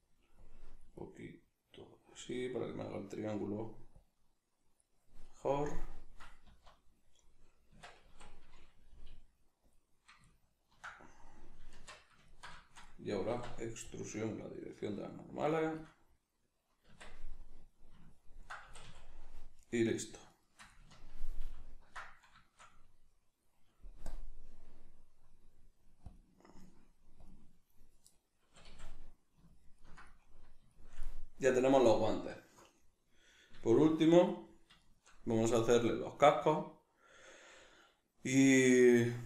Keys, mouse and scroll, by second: 6.5 z, 7.7 Tab, 8.1 a, 9.7-19.6 middle drag, 11.7 shift+Tab, 13.3 alt+e, 15.8 shift+click, 16.9 Tab, 18.7 a, 19.6 right click, 20.3 shift+right click, 21.5 ctrl+j, 22.4-24.0 shift+middle drag, 24.0-28.2 drag, 28.2-39.2 middle drag, 28.5 a.